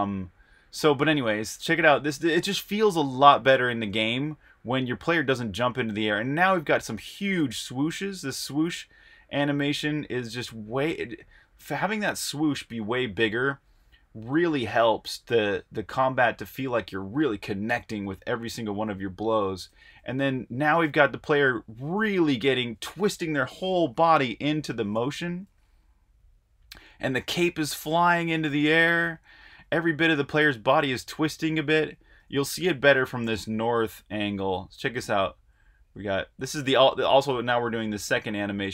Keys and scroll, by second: 0.8 super+`, 2.6-3.4 typing, 4.4 Right, 6.0 Left, 19.7 Right, 21.0 Right, 21.5-22.3 typing, 23.3-31.3 typing, 28.4 Right, 28.7 Right, 29.0 Right, 29.7 Right, 29.8 Right, 30.6 Right, 31.5 Right, 31.7 Right, 32.0 Right, 33.7-34.4 typing, 34.6 Left, 35.3 Left, 35.9 Right, 36.0 typing, 37.7-38.4 typing.